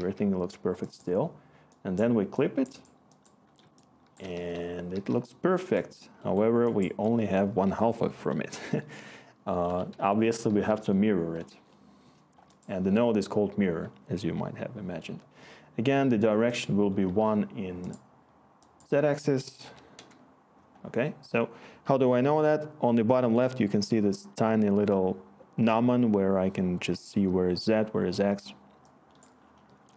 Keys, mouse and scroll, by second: 4.1 w, 4.1 w, 4.3 w, 4.9 w, 8.7 Tab, 9.6-11.1 typing, 11.4 Return, 17.0 1, 19.6 0, 19.9 Return.